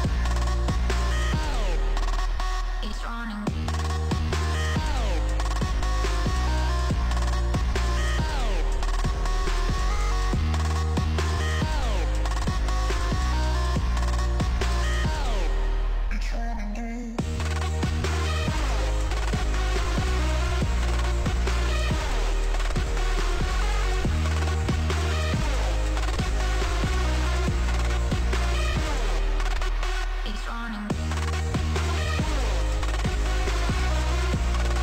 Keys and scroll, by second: 5.0 ctrl+space, 8.9 ctrl+z, 16.7 ctrl+s, 32.6 shift+Right, 33.2 shift+Left, 34.4 Right.